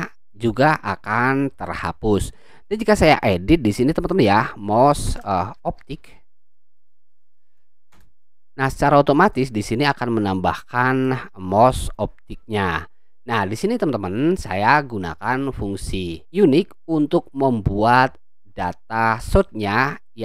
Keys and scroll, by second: 5.1-7.7 typing, 7.9 Return.